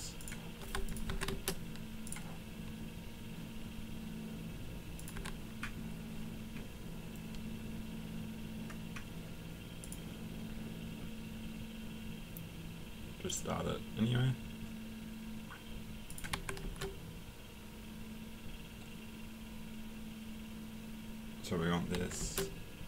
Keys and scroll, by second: 1.1 Escape, 5.2 Escape, 16.3 Escape, 21.9 Escape.